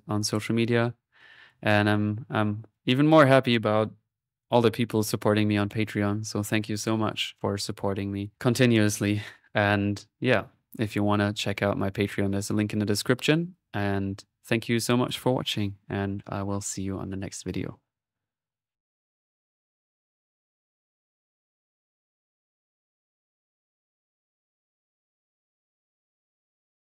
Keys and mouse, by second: 0.5 click, 1.2 click, 2.6 click.